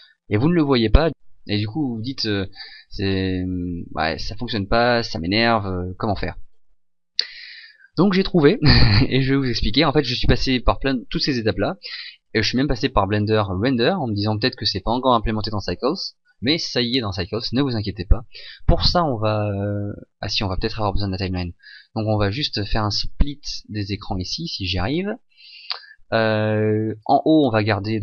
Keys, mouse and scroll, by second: 13.2 click, 21.9 right click, 24.0 right click.